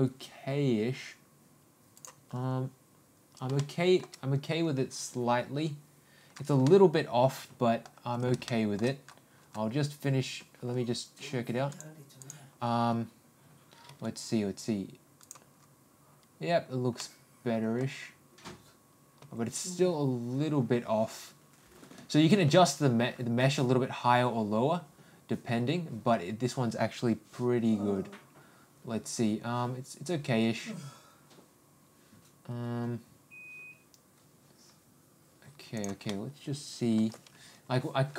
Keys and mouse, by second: 3.5 shift+middle click, 6.6-7.9 middle drag, 8.5 shift+middle click, 11.7 click, 12.2 click, 13.9 g, 17.0 middle click, 19.3 g, 36.1-36.9 middle drag.